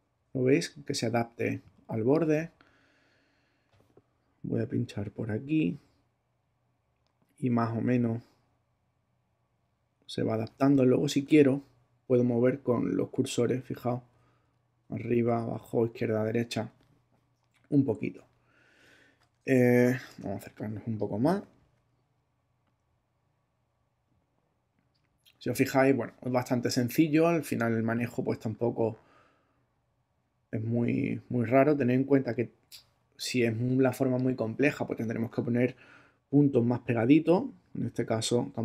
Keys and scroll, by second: 12.7 Left, 13.1 Right, 13.4 Left, 13.8 Right, 14.1 Left, 14.3 Right, 14.8 Up, 15.2 Down, 15.5 Left, 15.8 Right, 20.2 super+space, 21.1 space, 33.5 space.